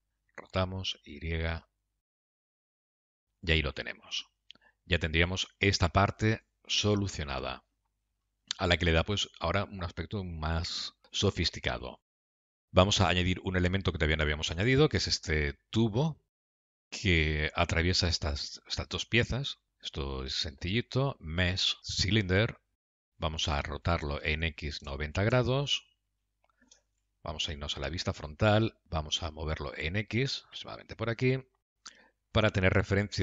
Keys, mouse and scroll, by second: 4.6 middle click, 8.3-8.7 scroll down 2, 8.7 middle click, 12.2 shift+middle click, 12.6 click, 12.9 middle click, 16.6 middle click, 20.6 shift+a, 23.0 middle click, 24.1 r, 26.5 scroll down 2, 27.6 KP_3, 28.0 KP_1, 29.0 g, 32.2 middle click.